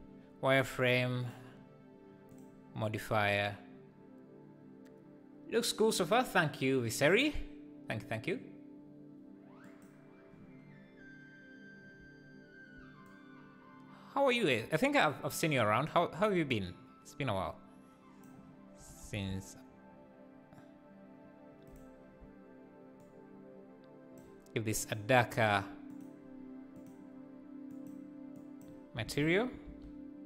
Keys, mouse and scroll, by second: 13.2-16.0 shift+drag, 18.7 g, 23.0-25.9 shift+drag, 27.7 click, 29.0 alt+a.